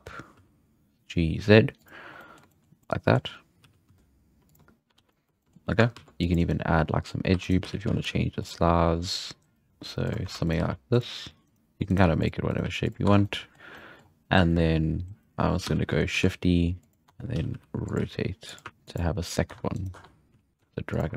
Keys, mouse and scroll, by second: 2.1-3.6 middle drag, 3.6 g, 4.9 alt+a, 5.1-5.6 shift+middle drag, 5.6 scroll up 2, 5.9 ctrl+r, 6.9-7.4 scroll up 3, 7.4 right drag, 7.6 g, 9.7-12.6 typing, 10.4 right click, 11.4 right click, 11.8 right click, 12.5 right click, 13.0 Tab, 13.1 scroll down 3, 13.2-13.7 middle drag, 13.7-14.3 scroll up 3, 15.6 z, 16.1 shift+d, 17.1 Tab, 17.3-18.7 typing, 19.5 Tab, 19.7 right click, 19.9 Tab, 20.3 z, 20.5 g.